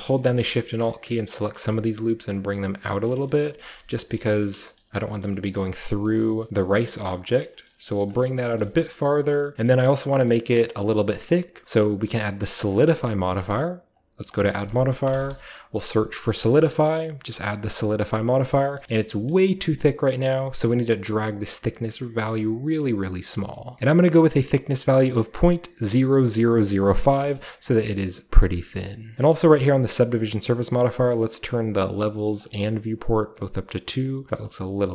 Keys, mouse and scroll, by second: 0.2-2.9 alt+middle drag, 2.1 g, 2.9 alt+shift+click, 4.0 g, 4.3 alt+shift+click, 4.5 alt+shift+scroll down 1, 4.8-6.5 alt+shift+middle drag, 6.7 g, 7.3-9.5 shift+drag, 7.8 g, 9.5 Tab, 9.7 typing, 9.8-11.0 shift+scroll up 1, 11.0-11.6 shift+scroll up 1, 12.7 click, 13.1-13.9 scroll down 1, 13.7-15.5 typing, 13.9 click, 14.3 click, 16.8 click, 17.2 scroll down 1, 18.3-20.7 middle drag, 18.3-18.8 scroll down 1, 18.8-20.0 shift+scroll up 1, 20.0-20.7 shift+scroll up 1, 20.7-22.7 shift+drag, 23.3 shift+click, 23.8 Return, 23.8 BackSpace, 23.8 5, 26.6-27.5 scroll down 1, 27.1 middle click, 27.3 middle drag, 27.3 a, 27.5-31.7 scroll up 1, 28.6 middle drag, 28.8 middle click, 29.1 shift+middle click, 29.3-32.4 shift+middle drag, 31.7-32.4 shift+scroll up 1, 32.4 click, 33.2-34.9 scroll down 1, 33.3-34.0 middle drag, 34.3 shift+middle drag.